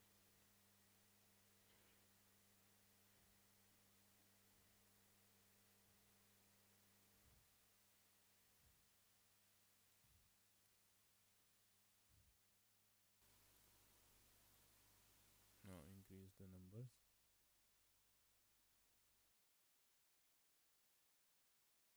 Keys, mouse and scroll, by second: 0.4 click, 1.6 click, 2.6 click, 3.5 click, 3.8 shift+middle click, 3.8 scroll down 1, 3.9 middle click, 4.5 click, 4.9 middle click, 5.6 click, 7.1 Tab, 7.5 Tab, 8.1 click, 8.4 Tab, 8.8 middle click, 9.0 Tab, 9.5 middle click, 9.8 Tab, 10.0 middle click, 10.6 shift+middle click, 10.7 middle click, 11.3 scroll down 1, 11.5 middle click, 13.7 click, 16.2 click, 17.3 shift+middle click, 17.5 middle click, 19.4 click, 19.9 shift+middle click, 20.1 middle click, 21.2 Tab, 21.8 middle click.